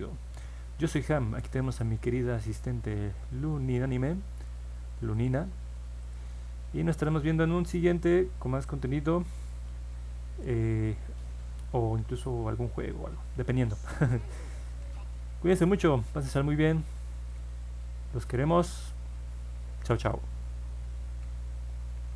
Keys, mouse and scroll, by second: 5.1 click, 6.0 click.